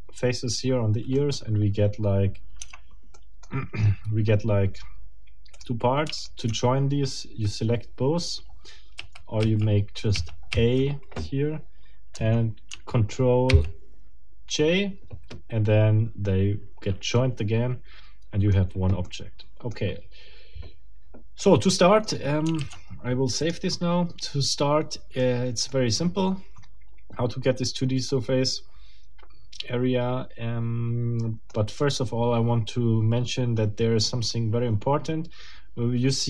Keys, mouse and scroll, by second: 1.2 middle click, 2.6 Tab, 3.1 middle click, 5.5 middle click, 6.2 shift+middle click, 9.0 a, 13.5 ctrl+j, 17.2-18.7 middle drag, 19.0 middle click, 21.4 middle click, 22.6 ctrl+s, 23.4 ctrl+click, 25.2 middle click, 28.1-31.6 middle drag.